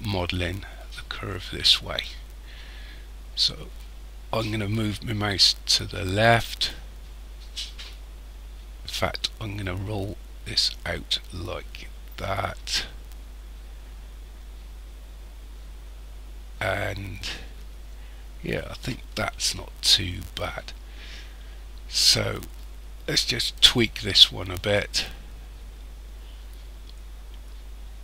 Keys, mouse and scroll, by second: 23.6 right click, 24.8 click.